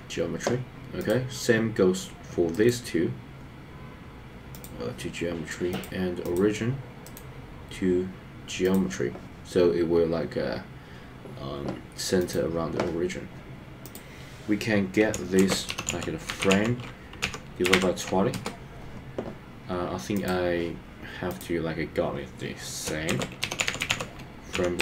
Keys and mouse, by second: 2.7-4.7 right drag, 7.2-8.9 right drag, 12.3 click, 13.9-18.6 drag, 20.1 click, 21.3-24.8 drag.